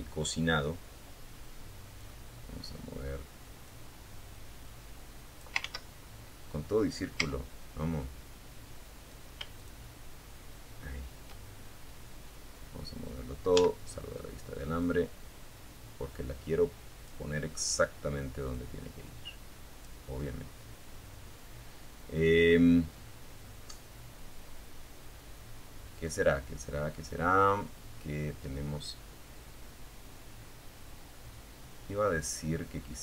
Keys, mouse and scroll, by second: 1.8-3.8 drag, 3.8 ctrl+z, 5.4 z, 7.8 shift+click, 11.8 z, 13.0-15.4 drag, 16.7-18.2 drag, 18.4-20.6 middle drag, 20.7-31.6 middle drag, 31.7-32.3 scroll up 1, 32.4 shift+middle click.